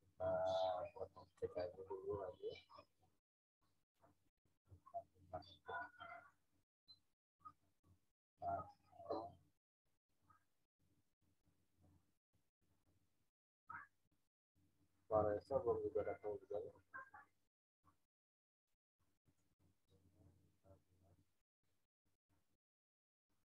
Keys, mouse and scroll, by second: 1.3 right click, 4.1 click, 7.3-8.0 scroll down 1, 17.3-18.6 scroll down 1, 19.2 click, 21.7-23.5 drag.